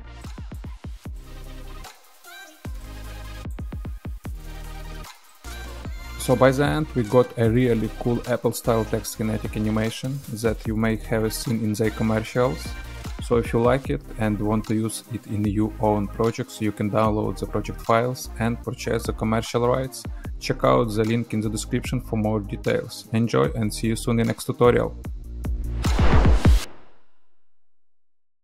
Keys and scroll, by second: 0.3 space, 0.8 space, 1.4 ctrl+[, 1.9 space, 2.4 ctrl+[, 2.9 space, 3.3 ctrl+d, 3.7 space, 4.1 ctrl+d, 4.1 ctrl+[, 5.0 space, 5.7 -.